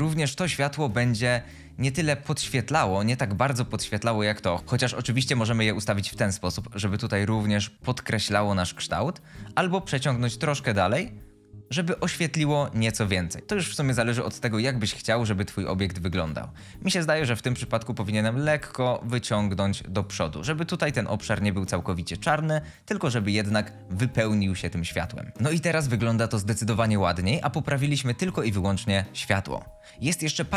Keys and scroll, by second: 1.9 typing, 4.0-4.8 typing, 9.7-10.0 typing, 16.1-16.6 typing.